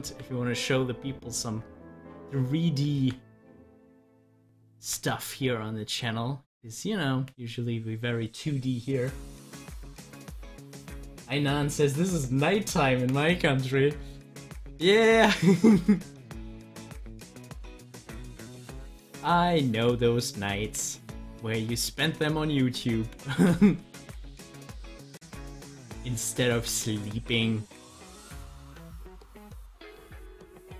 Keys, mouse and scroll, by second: 14.8 click, 17.2-19.3 drag, 22.5-30.7 drag.